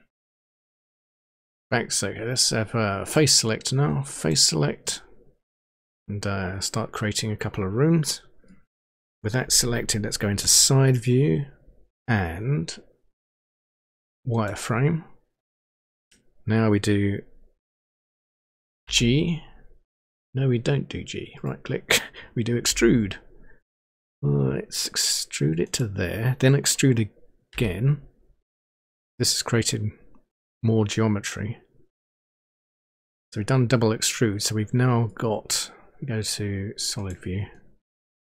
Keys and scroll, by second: 10.5 Page_Down, 18.9 g, 22.8 e, 27.7 e.